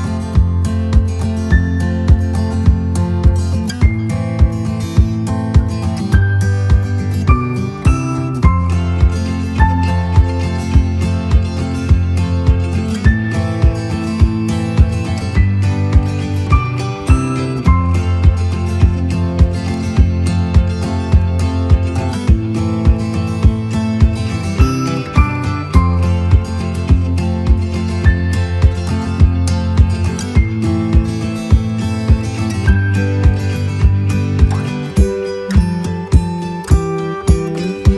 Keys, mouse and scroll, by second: 1.9 click, 2.9-4.5 right drag, 7.5 click, 9.3 click, 10.3 right click, 10.9 right click, 12.1 right click, 14.9-24.9 drag, 25.1 right click, 26.2 click, 28.5-30.1 right drag, 30.5 click, 32.1 click, 33.1 right click.